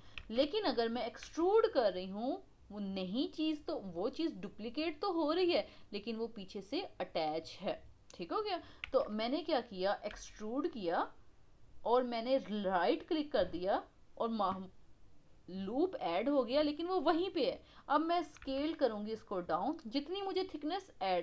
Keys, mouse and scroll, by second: 2.8 e, 8.9 ctrl+z, 10.1 e.